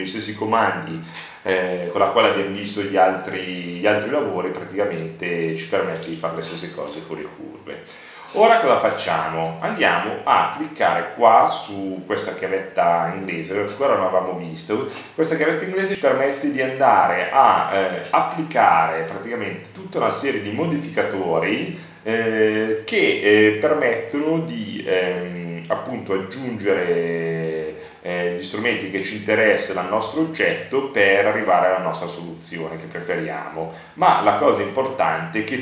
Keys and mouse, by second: 2.5-5.3 middle drag, 12.1 middle click, 12.9-32.7 drag.